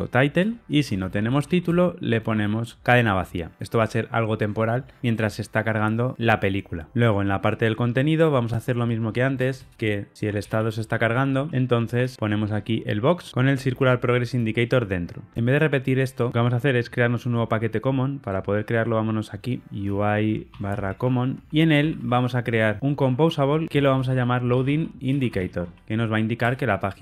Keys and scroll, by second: 0.3 Return, 21.5 super+n.